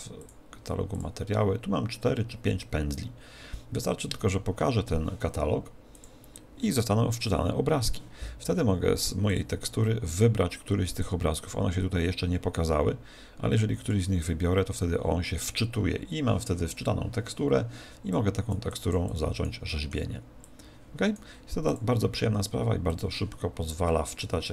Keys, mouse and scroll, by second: 6.0 click, 9.2 click, 18.1 click, 18.7 click, 19.6 middle click, 20.1 scroll up 1, 20.4 click, 21.6 click, 23.8 middle click, 24.4 click.